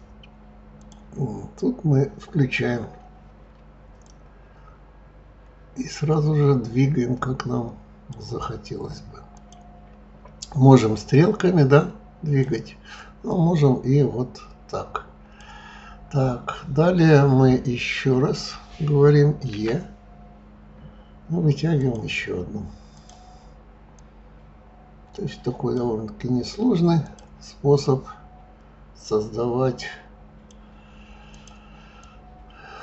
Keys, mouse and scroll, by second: 0.8 click, 4.0 click, 9.3 click, 10.7 click, 13.3 click, 19.5 e, 23.0 click, 23.9 click, 27.0 click, 27.8 click, 31.2 click, 32.0 click.